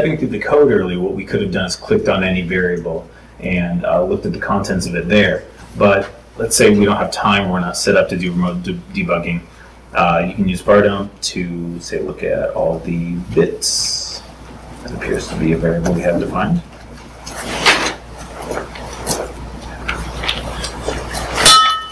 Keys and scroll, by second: 14.4 super+s, 15.0 super+Tab, 21.6 super+s.